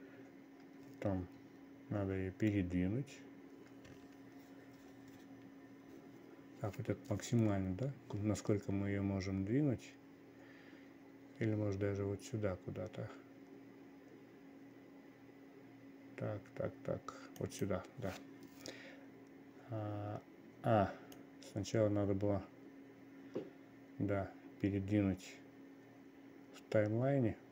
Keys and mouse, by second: 2.5 g, 21.7-27.5 drag.